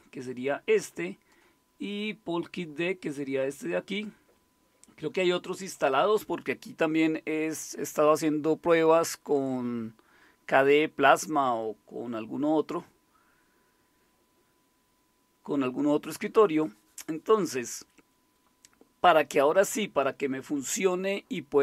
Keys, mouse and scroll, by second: 0.2-1.3 drag, 1.6 click.